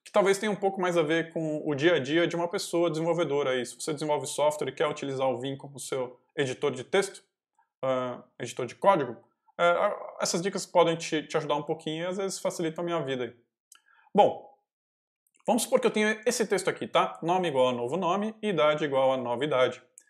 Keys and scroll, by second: 1.7 Return, 14.8-16.8 typing, 18.0 Escape, 18.0-19.7 typing.